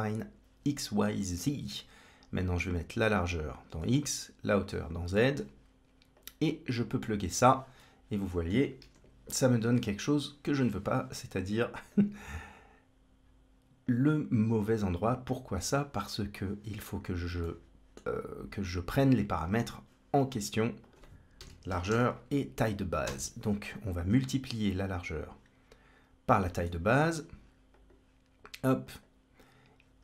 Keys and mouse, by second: 2.9-3.7 drag, 4.5-5.3 drag, 6.0-7.0 drag, 7.8-8.4 middle drag, 8.7 KP_1, 11.8-13.8 drag, 14.3-15.5 drag, 16.2 click, 17.3 middle click, 19.4 shift+a, 26.3-27.0 drag, 27.6-28.9 drag.